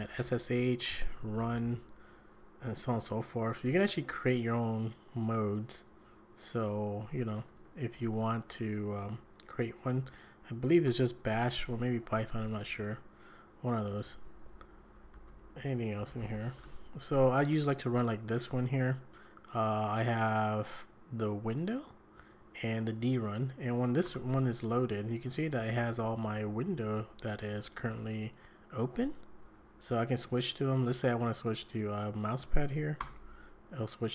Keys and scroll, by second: 0.0-2.0 typing, 7.0-8.4 typing, 9.0 Escape, 9.2 Escape, 12.0 Escape, 12.2 Escape, 12.4 l, 13.6-17.1 typing, 24.0 Return, 25.6 Down, 25.8 Down, 26.1 Up, 26.3 Up, 26.7 Down, 27.0 Down, 27.4 Up, 27.8 Up, 28.9 Down, 29.4 Down, 29.9 Up, 30.9 Down, 31.2 Up, 31.5 Up, 33.0 Return.